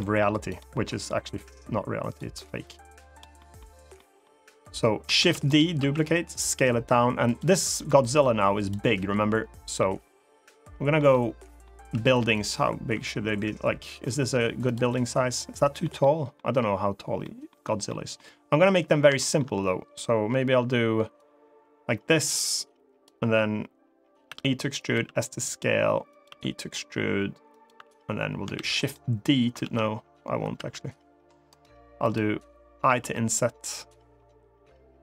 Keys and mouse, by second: 0.2 click, 1.2 click, 2.4 click, 3.1 middle click, 3.7 middle click, 4.4 click, 4.9 shift+d, 5.2 right click, 5.5 s, 7.0 click, 7.7 click, 9.5-10.7 middle drag, 10.9 middle click, 11.5 s, 12.1 click, 12.6 e, 14.4 click, 14.6 middle click, 15.7 middle click, 16.9 middle click, 17.6 middle click, 18.9 shift+middle click, 20.9-22.8 drag, 24.0 e, 24.5 click, 24.6 s, 25.8 click, 26.0 e, 27.2 click, 28.3 shift+d, 28.5 right click, 29.4 ctrl+z, 30.3 ctrl+r, 31.8 click, 32.7 i, 34.9 right click.